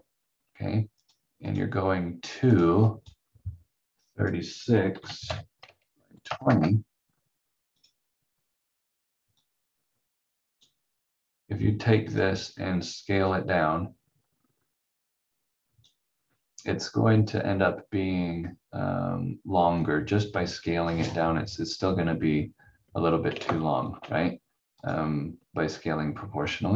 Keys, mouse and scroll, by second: 1.0 click, 4.7-6.2 typing, 6.4 Return, 9.4 click, 17.2 scroll up 1, 23.4 ctrl+z, 24.8 click, 26.1 scroll down 1.